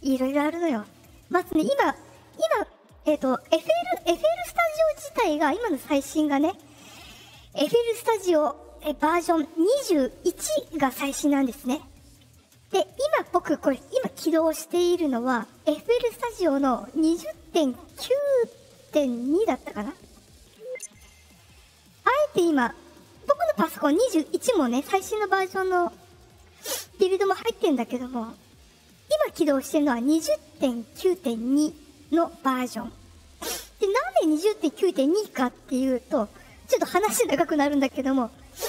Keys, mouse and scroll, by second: 15.8 click, 19.3 click, 30.9 click, 31.5 click.